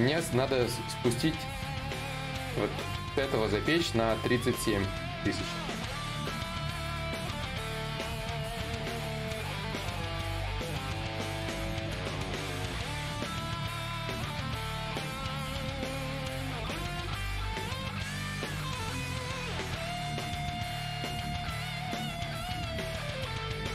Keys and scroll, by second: 9.9 s.